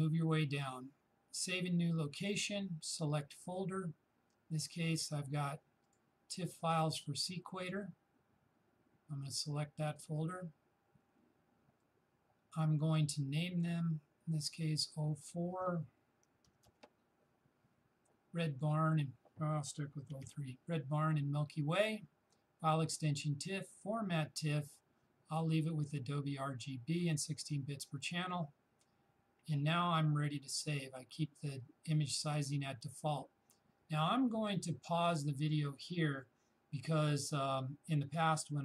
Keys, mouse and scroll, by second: 3.1 click, 5.9 click, 9.9 click, 13.6-16.4 drag, 16.4 BackSpace, 16.6 4, 20.1 BackSpace, 20.2 3.